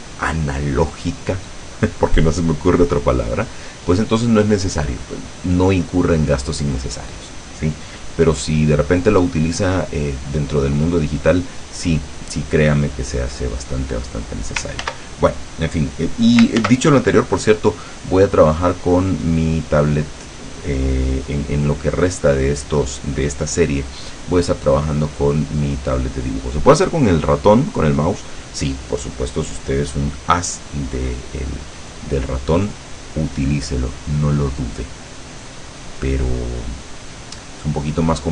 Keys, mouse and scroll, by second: 13.4 click, 15.0 ctrl+z, 15.4 ctrl+click, 16.7 ctrl+z.